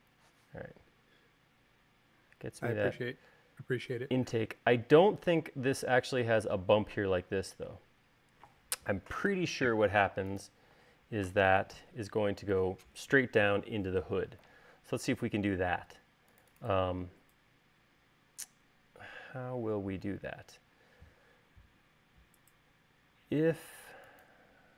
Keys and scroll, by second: 9.8 u, 11.8 u, 23.8 l.